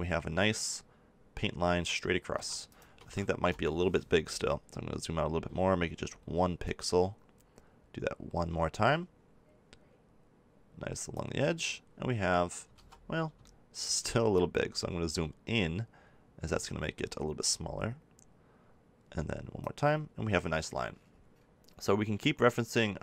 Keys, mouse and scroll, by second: 2.4 ctrl+z, 5.5-6.6 middle drag, 6.6-8.5 drag, 12.7 ctrl+z, 16.5-18.4 drag, 22.6 click.